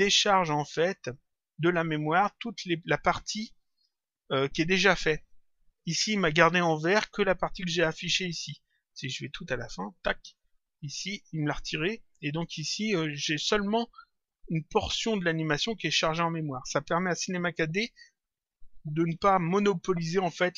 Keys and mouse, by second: 9.9 click.